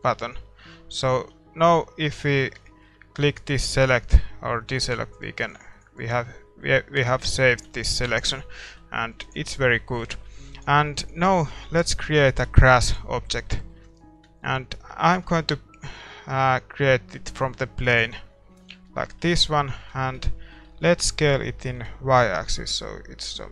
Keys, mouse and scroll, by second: 0.0-4.7 middle drag, 0.5 Tab, 1.0 Tab, 1.3 a, 3.7-7.8 drag, 6.4-10.8 middle drag, 7.8 ctrl+s, 8.7 Tab, 9.4 ctrl+s, 10.8 ctrl+s, 12.8-15.0 drag, 12.8-18.0 middle drag, 15.0 a, 18.0 shift+a, 18.5-20.4 middle drag, 20.4 Tab, 21.3 s, 21.9 middle click.